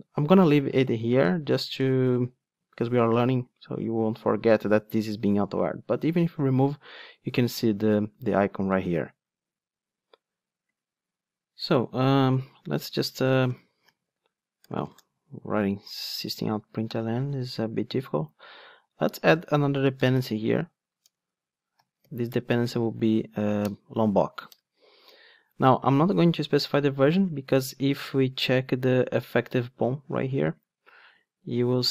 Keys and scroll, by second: 6.3 super+x, 21.1 Return.